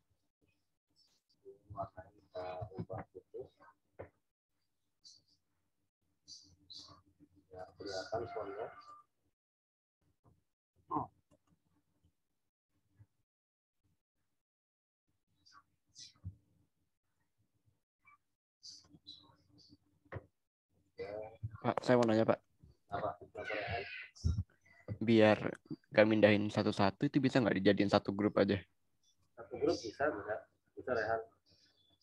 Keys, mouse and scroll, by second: 0.8 right click, 1.3 click, 1.6 t, 2.4 click, 2.7 ctrl+a, 5.1 click, 11.2 right click, 11.9 click, 12.9 ctrl+z, 16.2 t, 17.1 click, 17.5 ctrl+a, 18.8 click, 21.3 z, 22.3 ctrl+z, 23.3 click.